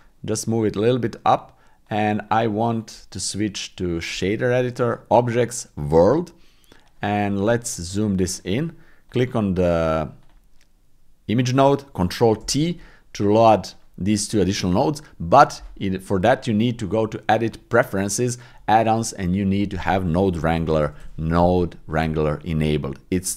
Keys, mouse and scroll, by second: 2.8-4.2 drag, 4.8-5.8 drag, 10.2 click, 12.4 ctrl+t, 16.6 click.